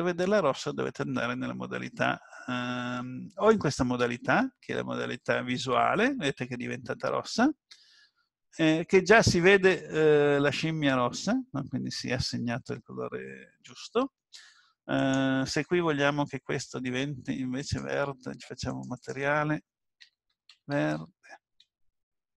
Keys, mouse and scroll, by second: 3.7 click, 8.7-9.5 scroll up 2, 9.5 middle click, 15.0 click, 17.6 click.